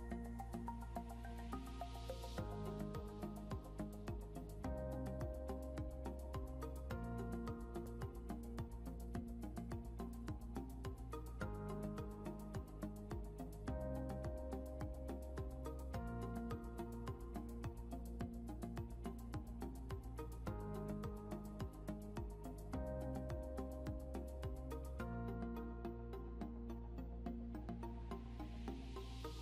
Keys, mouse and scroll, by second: 4.1 double click, 8.7 right click, 11.5 scroll down 1, 12.0 scroll up 1, 14.0 right click, 20.3 scroll down 1, 21.8 scroll up 1, 27.2 scroll up 1, 28.2 scroll down 1.